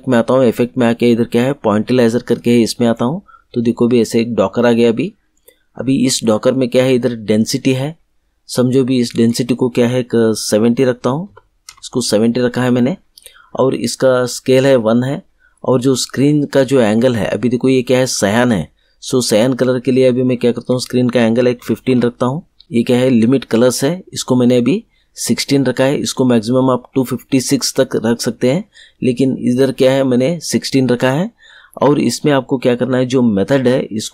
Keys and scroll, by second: 11.2 7, 11.6 0, 21.5 1, 21.8 5.